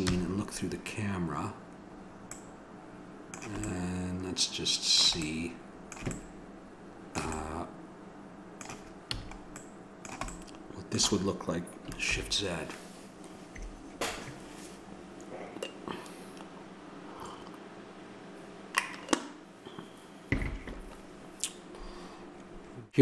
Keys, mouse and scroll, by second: 0.1 KP_0, 3.8 middle click, 5.3-6.6 middle drag, 9.1 a, 12.0 middle click, 12.7 shift+z.